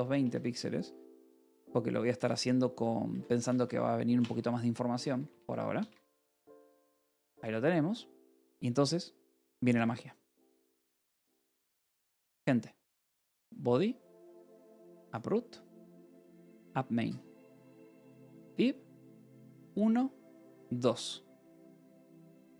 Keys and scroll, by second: 0.0-7.1 typing, 2.1 Return, 7.8 ctrl+s.